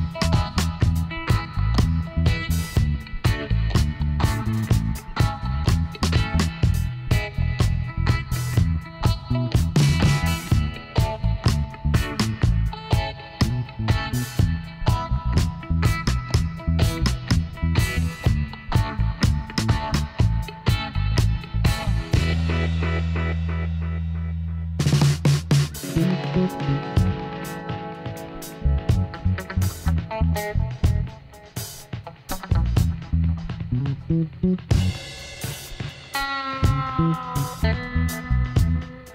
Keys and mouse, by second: 1.5-2.5 right drag, 2.5-4.5 middle drag, 3.3 i, 6.1 Tab, 6.3 middle click, 8.3 Tab, 9.5 KP_1, 9.9-10.9 middle drag, 13.8-16.2 middle drag, 15.6-17.3 drag, 17.9-19.7 drag, 19.8-22.1 middle drag, 22.6 Tab, 23.4 a, 28.0-31.1 middle drag, 29.0 KP_Divide, 33.0 Tab, 35.7-37.6 drag, 36.7-39.1 right drag.